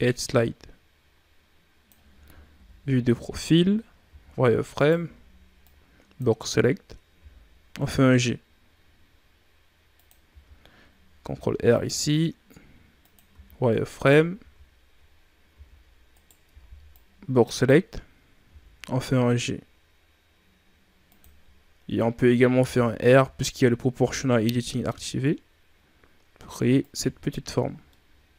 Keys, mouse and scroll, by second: 2.5 KP_3, 3.3-3.9 ctrl+scroll up 6, 3.9 z, 4.6 right click, 4.9 b, 7.1 g, 10.2 z, 11.2 ctrl+r, 13.2 e, 14.3 ctrl+z, 15.5 z, 16.0 right click, 16.4 b, 18.4 g, 22.5 r, 26.9 z, 27.2-27.8 scroll down 5, 27.4 Tab, 27.8-28.3 middle drag.